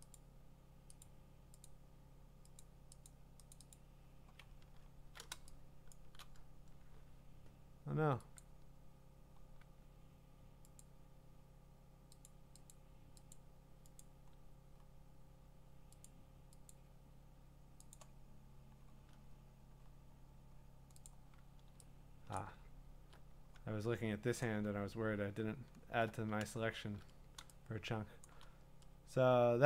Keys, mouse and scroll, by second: 0.1 click, 1.0 click, 1.6 click, 1.7 shift+click, 2.6 click, 3.1 click, 3.5 click, 3.7 click, 4.5-4.9 scroll, 6.1 click, 8.4 click, 9.1 click, 10.8 click, 12.3 click, 12.7 click, 13.3 click, 14.0 click, 14.5 scroll, 15.2 scroll, 16.0 click, 16.7 click, 17.9 click, 18.2 scroll, 19.8-20.7 scroll, 21.1 click, 21.5 middle click, 21.5 scroll down 10, 22.4 click, 22.7 scroll down 3, 24.6 scroll up 4, 24.9 scroll down 2, 25.2-25.6 scroll up 5, 25.6 scroll down 1, 25.8 scroll up 3, 26.0-26.5 scroll, 28.3 click.